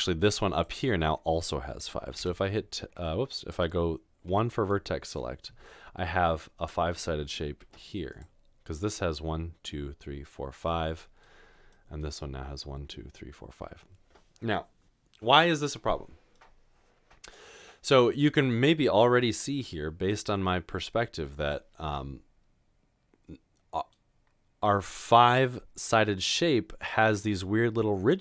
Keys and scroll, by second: 2.2 Tab, 2.9 Tab, 7.5 typing, 19.6 g.